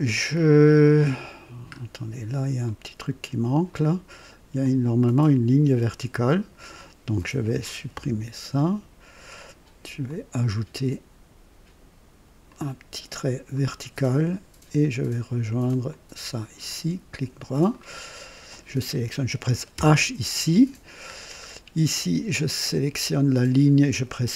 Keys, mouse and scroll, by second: 1.6-2.0 scroll up 2, 2.6 right click, 3.7 right click, 4.6-6.7 drag, 7.2 click, 7.9 Delete, 10.0 click, 12.4 click, 13.5 click, 15.8 click, 16.6 right click, 17.7 right click, 18.5 click, 19.7 h, 19.9 h, 21.1 scroll down 1, 23.2 click, 23.5 typing.